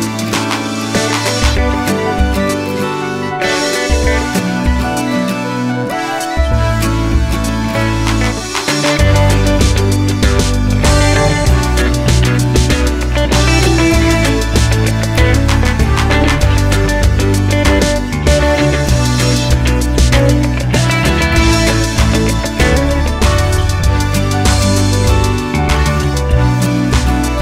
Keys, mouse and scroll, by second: 2.1 click, 2.8-8.4 drag, 4.6 Return, 8.6-27.4 drag, 11.0 KP_0, 11.6 z, 16.8 KP_Enter, 25.9 shift+a.